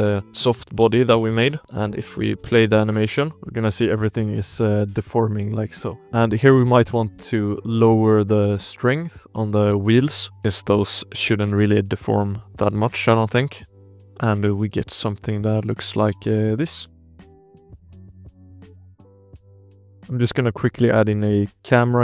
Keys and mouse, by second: 0.0 shift+click, 0.5 alt+a, 0.8 ctrl+s, 1.6-1.9 shift+middle drag, 1.6 space, 2.6-3.3 shift+drag, 3.3 alt+a, 3.3-5.3 typing, 3.5 shift+drag, 4.4 shift+drag, 5.7 click, 6.0 ctrl+z, 6.0 click, 6.5-7.0 shift+drag, 7.5 shift+click, 7.9 drag, 9.2 click, 9.4 drag, 10.1 shift+click, 10.4 shift+click, 10.4 shift+space, 11.3-12.4 drag, 13.6 space, 13.9 shift+click, 14.9 space, 15.0 z, 16.5 click, 17.1 KP_Decimal, 17.4 alt+a, 17.7 drag, 18.0 z, 18.6 click, 19.0-19.4 drag, 19.6 shift+click, 20.5 ctrl+s, 20.5 click, 20.5 space, 20.9 drag, 21.1 shift+a.